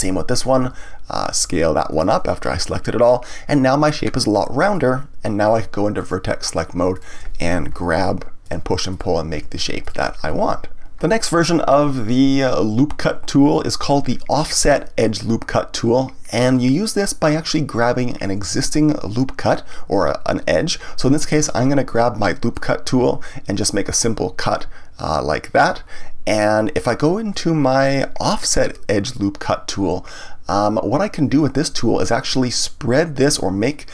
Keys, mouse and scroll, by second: 0.6 s, 2.0 click, 3.0-6.0 middle drag, 6.0 click, 6.9 click, 7.7 g, 8.9 click, 9.3 g, 9.8 click, 13.0-16.0 drag, 25.5 click, 27.3-30.3 drag.